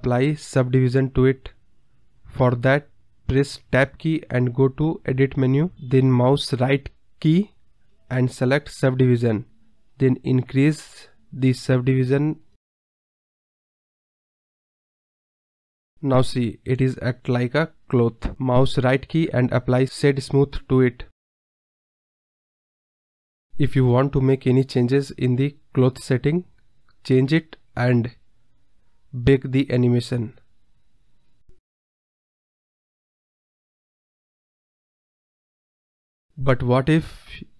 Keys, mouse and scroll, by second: 0.9 space, 1.4-1.9 drag, 1.9-2.4 middle drag, 2.4 click, 5.3 Tab, 6.0-7.6 right drag, 9.5 click, 9.7 a, 9.8-11.2 right drag, 11.2-13.1 drag, 13.1-13.5 scroll up 1, 13.5-14.6 drag, 15.2 Tab, 15.4 scroll down 2, 15.7 KP_1, 18.5-19.7 right drag, 23.5 space, 24.1-25.7 drag, 25.9-26.9 scroll down 22, 26.9 click, 27.1-27.5 scroll down 1, 27.5-28.5 drag, 28.5-29.6 scroll up 8, 29.6-30.3 scroll down 5, 30.3-30.8 drag, 30.8-32.1 scroll down 5, 32.1-33.7 scroll down 2, 34.9 click, 36.4 space.